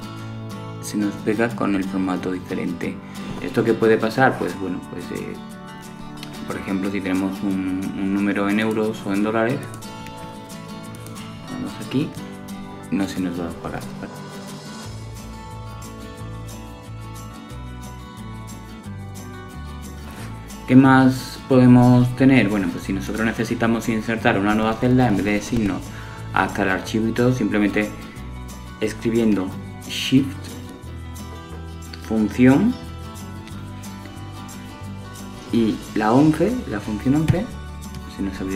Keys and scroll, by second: 20.0 shift+F11.